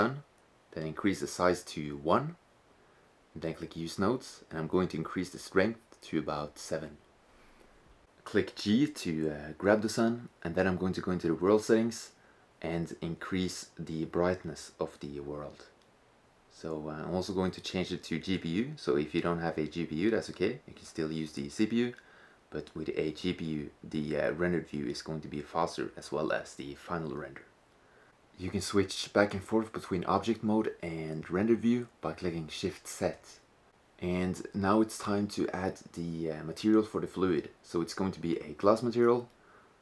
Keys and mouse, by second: 3.4-6.0 drag, 7.8 g, 10.2-11.2 drag, 11.3-13.1 drag, 13.2 click, 15.4-18.6 drag, 20.2 click, 20.4 click, 21.4-21.9 drag, 23.0-24.7 middle drag, 28.0 shift+z, 32.1-37.2 drag, 37.8 click.